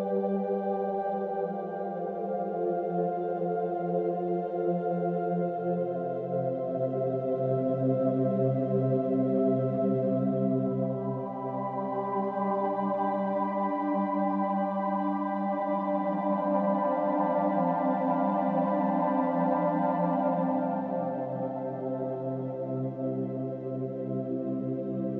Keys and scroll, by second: 17.9 ctrl+z, 19.9 ctrl+z.